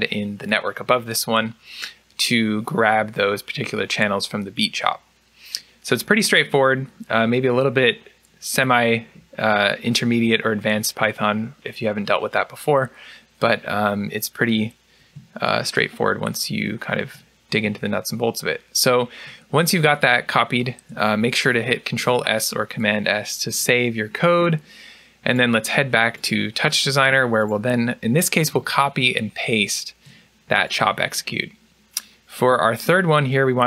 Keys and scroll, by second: 21.9 ctrl+s, 28.7 ctrl+c, 29.3 ctrl+v.